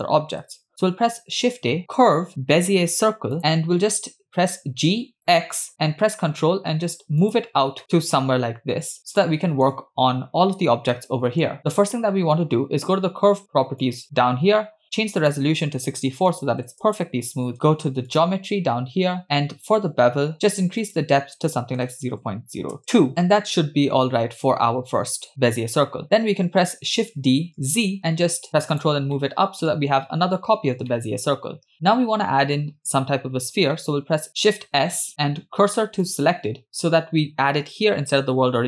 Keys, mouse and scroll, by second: 1.3 shift+a, 4.6 g, 7.8 shift+middle click, 8.8-9.1 scroll up 4, 9.2-9.7 shift+middle drag, 11.0 middle click, 13.8 click, 15.2-16.7 drag, 18.1 click, 18.8-19.7 scroll down 1, 19.7-20.3 scroll down 4, 20.9-23.1 drag, 23.1-24.3 shift+middle drag, 25.2-25.5 scroll up 1, 26.9 shift+d, 29.2 middle click, 30.9-31.3 shift+middle drag, 34.1 shift+a, 34.7 shift+s.